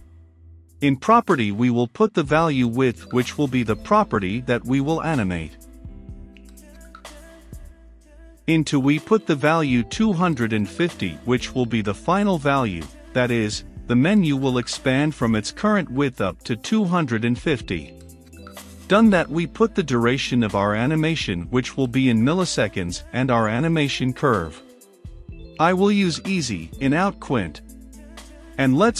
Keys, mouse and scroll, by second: 0.0-0.7 typing, 1.1 Down, 1.6 Up, 1.8 Return, 2.4-4.2 typing, 4.4-9.8 drag, 9.8 Return, 10.1-10.9 typing, 12.3 space, 13.8 Return, 14.1-15.1 typing, 18.6-20.5 typing, 20.3 Return, 21.1 Return, 22.0-26.4 typing, 23.3 Down, 23.6 Return, 26.9 Down, 27.7 Return.